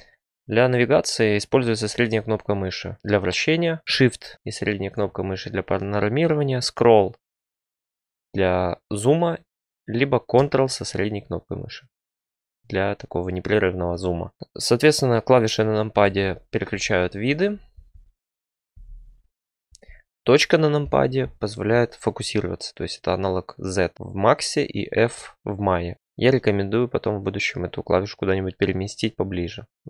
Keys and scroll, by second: 15.9-17.2 typing, 20.8 typing.